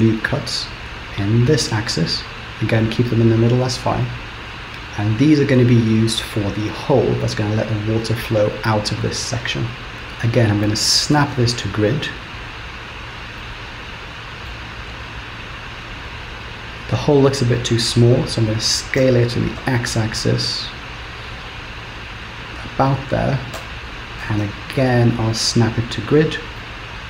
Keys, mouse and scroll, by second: 4.3-7.7 scroll up 4, 9.9 ctrl+z, 11.3 shift+s, 13.1-13.6 scroll down 3, 13.4 middle click, 14.8-15.6 scroll up 3, 15.6-16.4 scroll down 1, 19.8 s, 23.6 KP_7, 24.4 shift+s, 26.6 middle click.